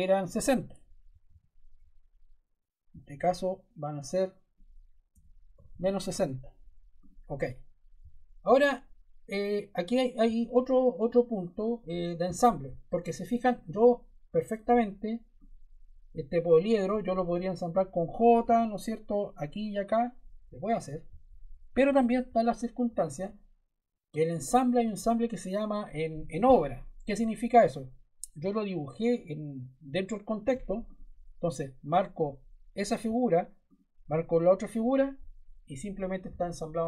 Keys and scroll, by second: 0.8-1.7 typing, 4.8-6.1 typing, 18.4 j, 21.6 super+Caps_Lock, 21.7 super+z.